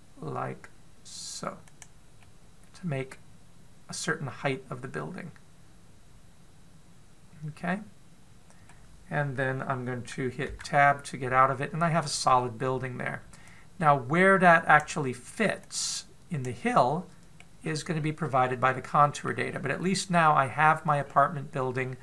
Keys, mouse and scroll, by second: 3.0 middle click, 11.4 Tab, 12.8-13.1 scroll down 2, 13.1-14.3 scroll up 1, 14.3 click, 16.5 click, 17.5 middle click, 18.4-19.7 scroll down 9, 19.2 middle click, 20.3-21.8 scroll up 10, 21.8-22.0 scroll up 3.